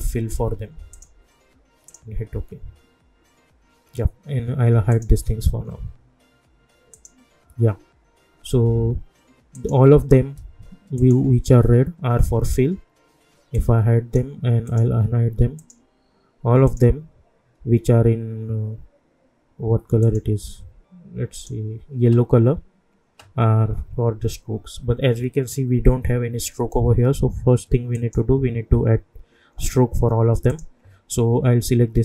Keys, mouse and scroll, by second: 4.9 click, 8.4-9.5 scroll down 1, 9.5 click, 9.9 scroll down 1, 10.9 shift+click, 13.5 click, 14.9 scroll up 1, 15.6 shift+click, 20.0 click, 27.9 click, 30.5 click.